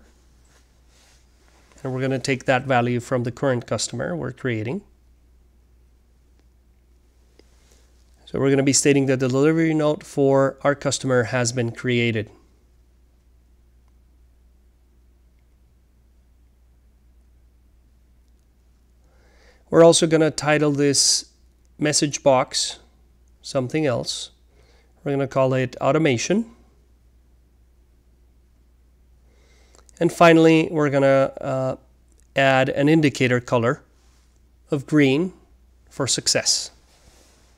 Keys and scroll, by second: 0.0-4.5 typing, 6.2-8.8 typing, 9.8 alt+c, 10.8-14.4 typing, 16.6 typing, 17.7 shift+0, 19.7-21.8 typing, 22.8 typing, 24.2 typing, 25.3-32.6 typing, 33.7-36.0 typing, 37.1-37.5 typing.